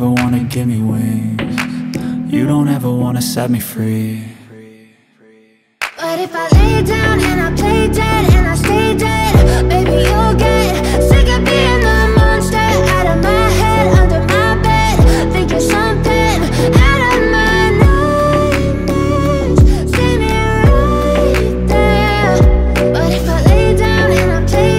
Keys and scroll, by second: 0.9 p, 1.5 u, 1.8 Return, 2.8 1.